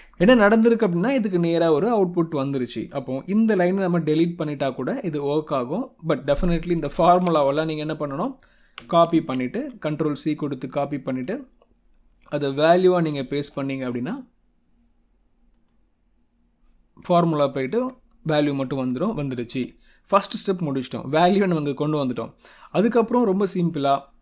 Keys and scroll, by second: 6.8 ctrl+shift+Down, 9.0 ctrl+c, 17.7 F2, 18.2 Escape, 18.7 F2, 19.3 Escape.